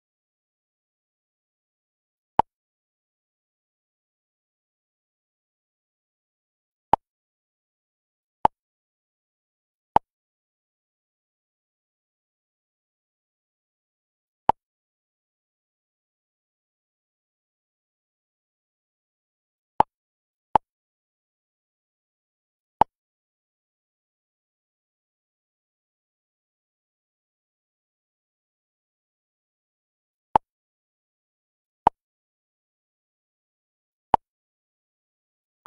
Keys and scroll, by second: 2.7 ctrl++, 15.7 ctrl+-.